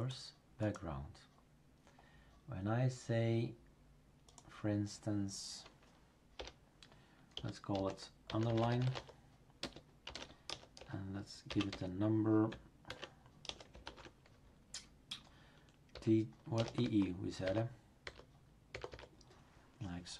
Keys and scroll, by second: 6.4 Return, 7.3-13.8 typing, 15.9-18.0 typing.